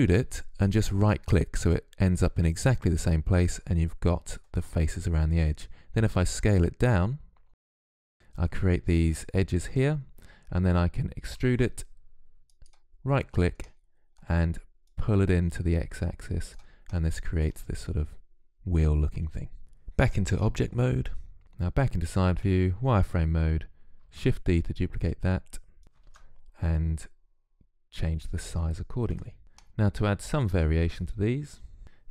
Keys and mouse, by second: 5.8 s, 11.2 e, 13.5-16.9 drag, 16.9-19.7 middle drag, 19.7 Tab, 21.4-24.9 typing, 26.9 shift+d, 27.7 s, 28.8 Tab, 29.1 Tab, 29.3 z, 29.6-31.8 drag.